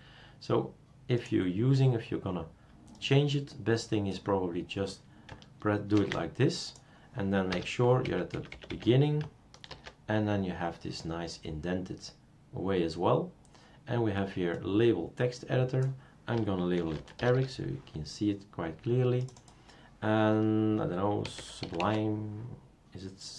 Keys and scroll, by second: 5.9 ctrl+c, 7.0 ctrl+c, 7.5 Return, 8.0 BackSpace, 8.3 Left, 8.5 BackSpace, 8.7 BackSpace, 9.7 ctrl+v, 16.5-17.8 typing, 21.0-22.3 typing.